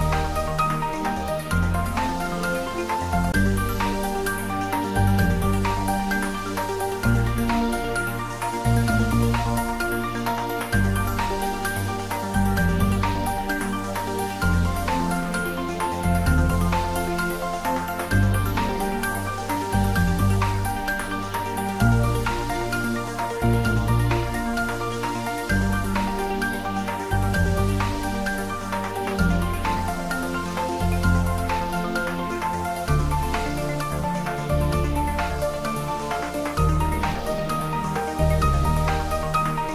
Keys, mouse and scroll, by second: 2.5 Return, 3.9-4.6 scroll down 2, 4.6-5.3 scroll down 1, 5.3-6.4 middle drag, 10.0 click, 22.1 ctrl+d, 24.3 ctrl+s, 27.9-31.8 middle drag, 32.1 click, 37.0 click.